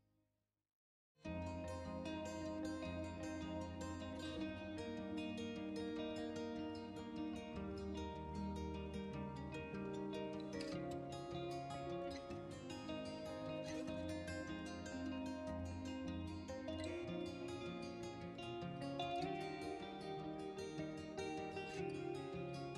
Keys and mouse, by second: 4.7 click, 5.9 Tab, 7.3-8.7 drag, 9.3 r, 9.5 x, 12.6 Escape, 13.3 ctrl+z, 13.5 ctrl+z, 14.7 g, 15.2 Escape, 15.4 Escape, 16.4-17.4 drag, 18.2 g, 18.9 shift+x.